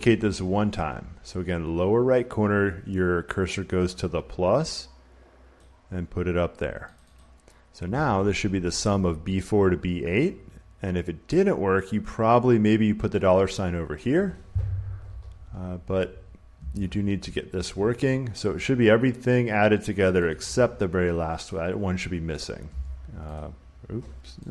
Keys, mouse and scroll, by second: 5.5 click, 6.9 click, 7.1 click, 13.9 click, 15.9 click, 16.5 Escape, 20.0-22.3 drag, 22.6 Escape, 23.3 click.